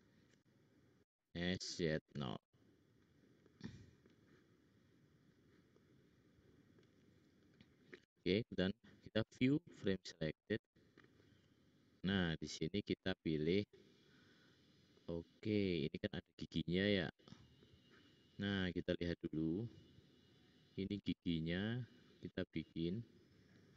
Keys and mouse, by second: 0.9 s, 5.1 middle click, 6.3 middle click, 6.5 middle click, 6.6 click, 8.7-9.7 drag, 8.7-10.2 middle drag, 8.7-9.7 right drag, 9.8 click, 9.8 right click, 11.9 middle click, 14.4 click, 18.9-21.9 drag, 18.9-21.9 middle drag, 18.9-21.9 right drag, 22.8 click.